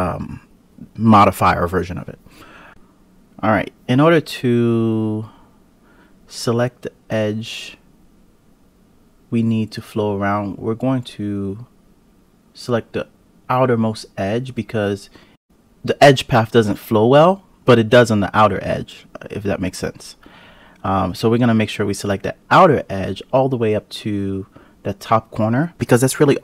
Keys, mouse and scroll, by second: 0.8 click, 1.4 alt+click, 2.7 KP_Decimal, 2.8 click, 3.9-4.8 scroll up 3, 4.8 scroll up 1, 5.0 click, 5.6 click, 6.6 click, 7.5 alt+shift+click, 8.1 alt+click, 9.0-10.0 scroll down 4, 10.0-11.6 scroll up 3, 11.6 alt+shift+click, 12.2-13.6 scroll down 12, 13.6-14.8 scroll up 2, 14.8 KP_Decimal, 15.3 scroll up 1, 15.5 alt+shift+click, 16.0-18.1 scroll down 7, 18.4-19.5 scroll down 4, 19.5-20.8 scroll up 1, 20.8 scroll up 1, 20.9 click, 25.6 scroll up 2, 25.8 g.